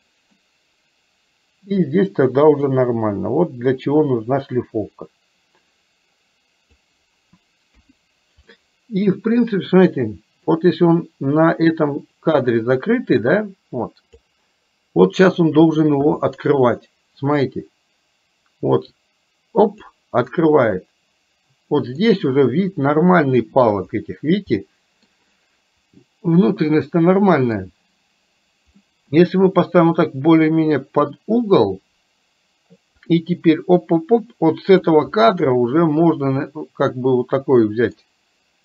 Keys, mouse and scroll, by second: 0.3-2.0 middle drag, 2.7-6.8 drag, 7.7 KP_1, 8.6-9.6 middle drag, 10.6-14.3 drag, 15.3 click, 17.6-20.0 drag, 20.3-23.7 middle drag, 24.6 middle click, 26.7-27.7 middle drag, 29.0-31.2 middle drag, 33.2-35.0 drag, 35.7-38.1 middle drag.